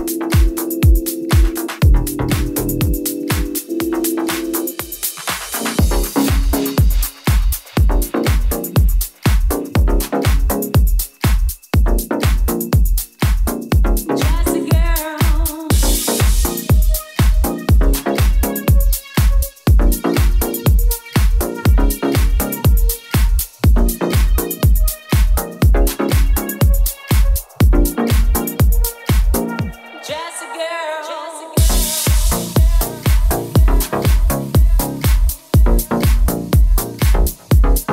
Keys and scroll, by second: 0.8 Left, 1.5 Left, 1.9 Right, 2.3 Up, 2.6 Down, 3.0 Up, 3.1 Down, 8.1 Down, 8.3 Up, 8.6 Down, 8.9 Up, 14.8 super+c, 16.0 super+v, 16.2 Return, 17.5 super+v, 17.6 Return, 18.7 super+v, 18.8 Return, 19.5 Down, 19.9 Up, 20.8 Down, 20.9 Up, 21.4 Right, 21.7 Left, 25.4 super+j, 25.9 super+v, 31.7 Right, 37.3 super+s.